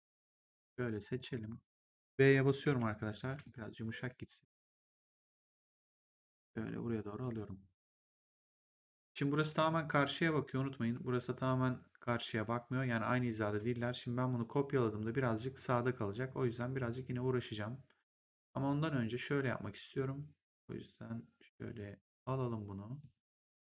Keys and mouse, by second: 0.5 click, 2.5 b, 3.3 middle click, 4.6 w, 5.7 click, 7.9 right click, 9.5 click, 10.7 click, 14.2 click, 18.4 right click, 20.4 click, 23.5 click.